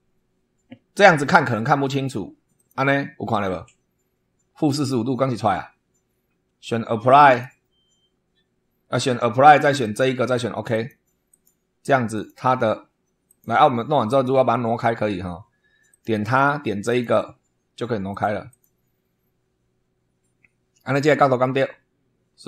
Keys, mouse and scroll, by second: 2.5 click, 7.2 click, 9.8 click, 10.6 click, 11.2 click, 12.1 click, 13.2 click, 15.8 click, 16.8 click, 18.0 click, 18.4 click.